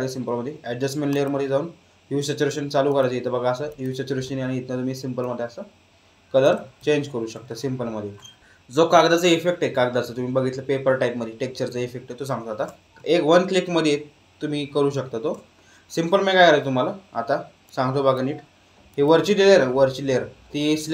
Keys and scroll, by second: 6.7 ctrl+z.